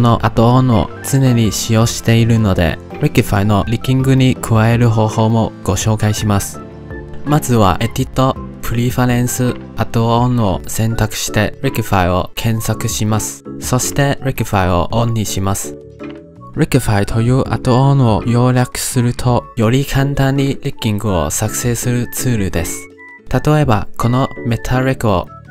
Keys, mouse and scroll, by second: 7.8-10.3 drag, 23.6 middle click, 24.0 shift+a.